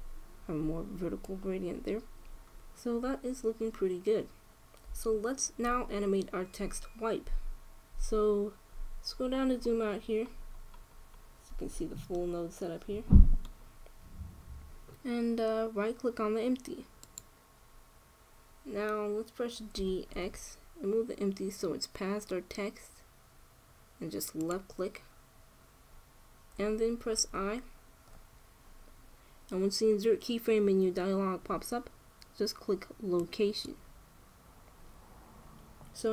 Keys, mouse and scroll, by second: 10.0-14.6 middle drag, 17.8-19.5 right drag, 20.7 g, 27.8 i.